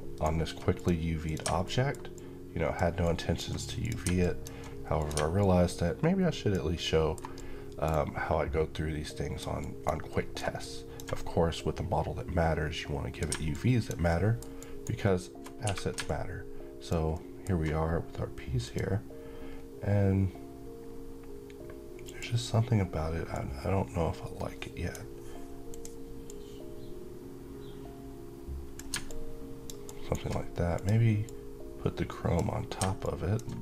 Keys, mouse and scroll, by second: 0.5 click, 1.4 middle click, 1.9-2.5 alt+drag, 6.5-9.2 alt+middle click, 7.1-9.4 alt+drag, 9.9 alt+middle click, 10.3-10.9 alt+drag, 13.8 alt+middle click, 14.3 alt+right click, 14.8-15.4 alt+middle click, 15.4 1, 15.8-16.7 click, 16.8 alt+middle click, 18.3 click, 21.7-24.9 drag, 28.8-29.4 click, 29.6 alt+right click, 30.5-32.2 drag.